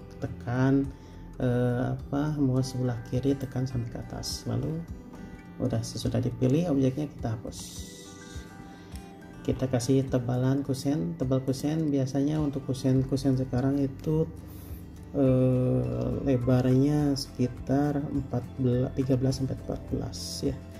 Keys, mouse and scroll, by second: 7.8 Delete, 9.7 p, 10.1 scroll up 1.